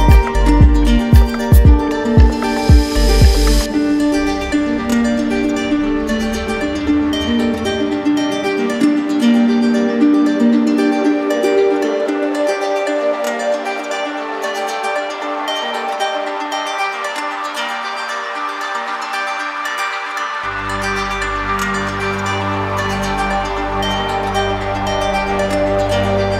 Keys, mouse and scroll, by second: 0.0 click, 0.7 click, 1.8 click, 2.4 click, 3.0 click, 4.7 click, 7.2 click, 16.8 click, 20.8 click, 21.3 click, 21.6 click, 22.5 click, 24.1 click, 25.0 click.